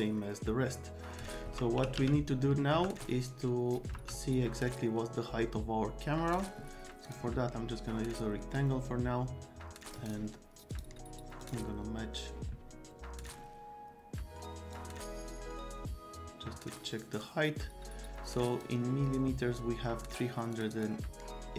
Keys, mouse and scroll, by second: 1.1 right click, 1.5-2.5 typing, 2.4 right click, 2.7 F3, 3.9 F3, 6.3 click, 7.0 click, 8.5-10.1 drag, 9.9 scroll up 2, 10.7 click, 11.4 click, 13.2 click, 14.7-18.6 drag, 20.5 click, 20.7 click.